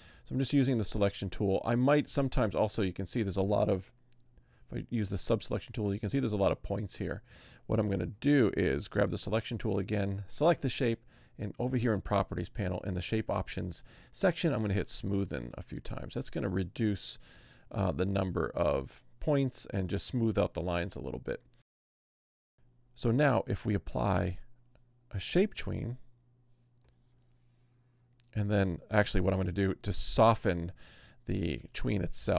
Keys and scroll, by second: 4.2 a, 9.3 v, 17.2 a, 20.5 v.